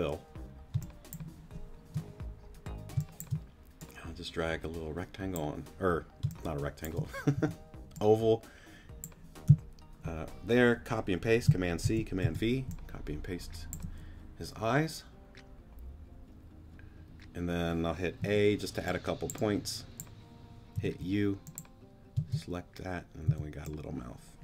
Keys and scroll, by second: 0.7 space, 2.9 space, 6.2 space, 7.3 t, 11.8 super+c, 12.2 super+v, 18.2 a, 20.7 u, 22.1 space, 23.2 c.